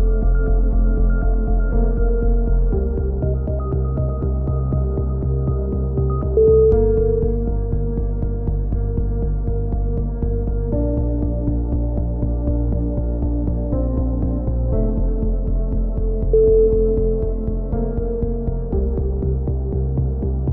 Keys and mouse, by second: 0.1 click, 1.4 ctrl+z, 1.7-3.0 drag, 3.9 click, 3.9 a, 4.1 z, 4.5 click, 4.9 z, 5.1 click, 5.3 middle click, 6.0 click, 6.4 right click, 6.6 l, 6.9-8.6 middle drag, 9.0 b, 10.7 middle click, 11.3 c, 12.1-13.2 drag, 12.5 right click, 13.9 a, 14.2 click, 16.7-18.3 right drag, 18.3 click, 19.1 a, 19.4 z, 19.6 middle click, 20.1 click.